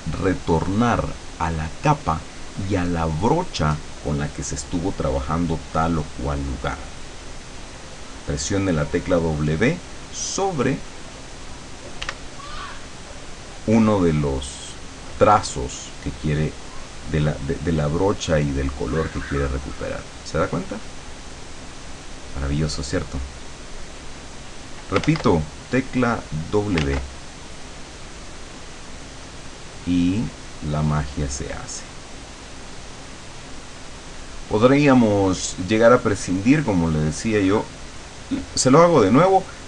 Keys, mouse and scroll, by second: 12.1 w, 18.8-20.6 drag, 21.3 click, 22.0 click, 24.4 click, 25.1 ctrl+z, 25.6-26.7 ctrl+drag, 26.9 ctrl+z, 27.6-29.0 drag, 30.3-31.3 drag, 32.4-33.9 drag, 36.2 click, 38.1 click.